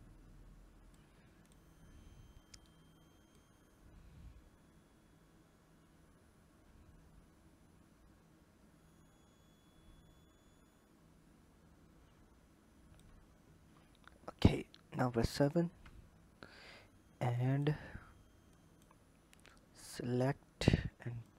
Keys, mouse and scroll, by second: 0.8 click, 3.2 click, 13.6-13.9 scroll down 9, 14.7 KP_7, 17.2 click, 18.3 click, 19.2 click, 21.1 click.